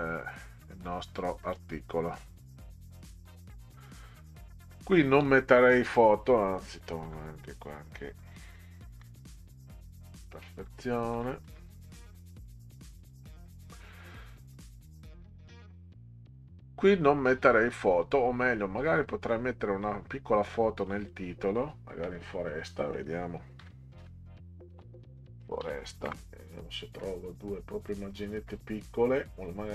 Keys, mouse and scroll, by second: 0.5 click, 5.8 click, 6.1 click, 7.0 Delete, 8.9 ctrl+z, 10.6 Delete, 11.1 Delete, 11.4 Delete, 13.0 click, 13.6 scroll down 4, 14.4 scroll down 2, 14.9 scroll up 2, 17.4 scroll down 2, 18.0 scroll up 2, 20.9 click, 22.5 click, 23.6-26.1 typing, 27.9 click.